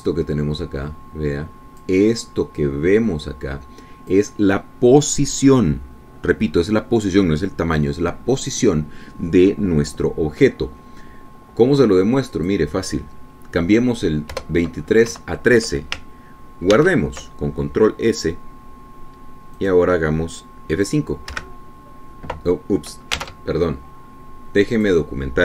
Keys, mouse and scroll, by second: 0.2 click, 1.6-3.3 drag, 3.9-5.6 drag, 13.7 click, 15.7 BackSpace, 16.4 KP_1, 18.1 ctrl+s, 20.9 click, 22.7 F5, 24.7 alt+Tab.